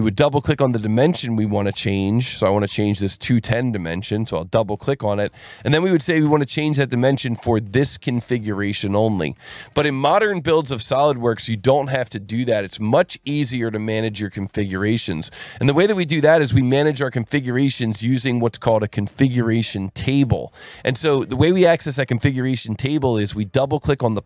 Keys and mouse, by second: 4.5 click, 5.8 alt+1, 6.2 click, 6.8 ctrl+shift+click, 9.6 alt+1, 11.5 click, 12.1 click, 14.7 click, 15.3 click, 16.3 click, 16.7 Delete, 17.7 click, 18.3 click, 23.9 click.